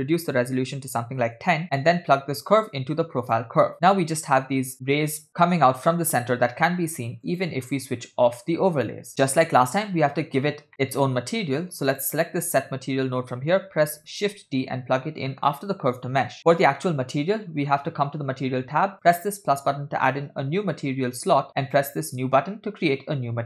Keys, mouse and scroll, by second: 2.5-3.5 drag, 3.9-5.8 middle drag, 7.3 click, 8.6 middle click, 10.6 scroll down 2, 10.9 middle click, 11.9 click, 14.3 shift+d, 19.0 click, 21.7-22.4 drag.